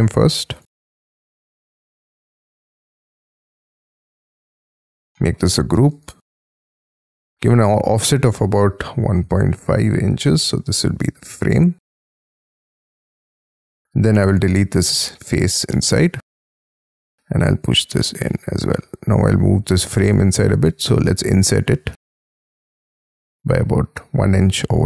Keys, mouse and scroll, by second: 1.7 Escape, 2.9 Left, 4.4 space, 4.7 double click, 5.2 middle click, 5.4 g, 5.9 double click, 6.2 double click, 6.6 scroll up 4, 6.8 f, 8.0 1, 9.1 ., 9.6 5, 10.2 shift+', 10.4 Return, 11.0 space, 11.7 middle click, 12.5-13.0 scroll up 13, 13.8 p, 13.8 space, 14.4 Delete, 15.2 Delete, 15.3 scroll down 7, 15.7 middle click, 16.1-16.8 scroll up 11, 16.8 p, 18.2 space, 18.4 Escape, 19.1-20.0 scroll up 3, 19.1 m, 21.4 shift+click, 21.9 space, 22.0-23.8 scroll down 26, 23.8-24.3 scroll up 13, 24.6 scroll down 7.